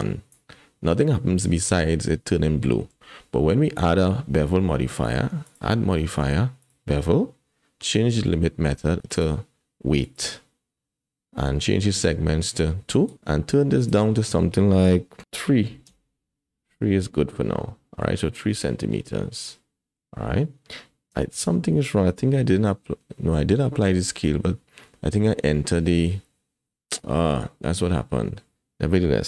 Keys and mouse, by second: 2.9 n, 5.5-6.7 drag, 9.1-10.1 drag, 13.8-15.9 drag, 19.5 middle click, 21.1 Tab, 22.3 n.